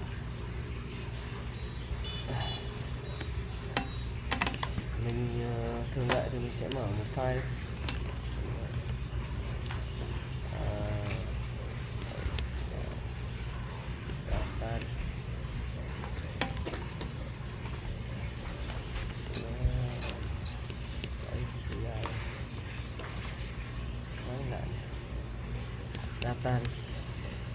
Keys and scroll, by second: 0.0-0.7 typing, 3.2 typing, 7.4-10.1 typing, 12.0-13.0 typing, 14.3-16.6 typing, 18.9-23.5 typing, 25.8-27.5 typing.